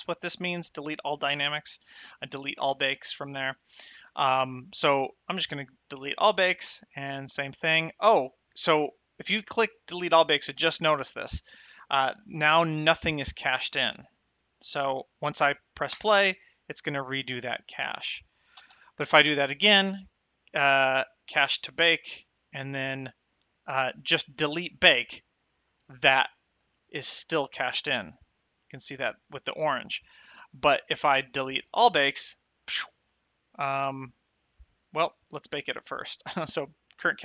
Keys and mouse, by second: 0.1 click, 6.1 click, 16.2 space, 18.9 space, 21.7 click, 25.3 click, 32.1 click.